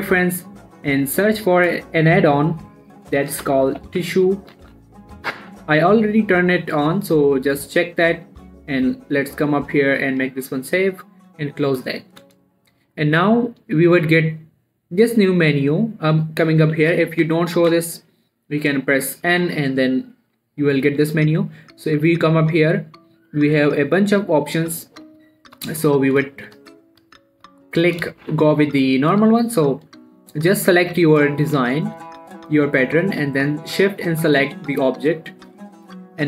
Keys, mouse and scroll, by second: 3.7-5.0 typing, 5.7 click, 12.1 middle click, 12.9 click, 13.3-13.7 scroll down 1, 13.7 middle click, 15.4 click, 17.2 n, 17.5 n, 18.0 n, 19.7 n, 22.7 click, 25.1 middle click, 25.8 shift+middle click, 26.4 scroll up 1, 26.9 shift+middle click, 27.2 middle click, 28.1 scroll down 1, 28.5 shift+middle click, 30.2 click, 31.3 g, 31.6 right click, 31.9 middle click, 32.1-33.0 scroll up 1, 34.7 shift+click.